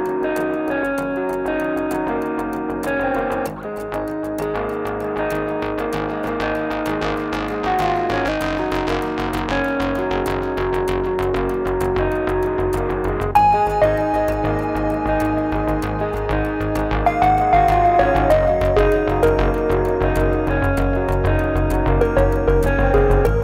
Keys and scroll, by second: 13.4 super+z, 13.7 x.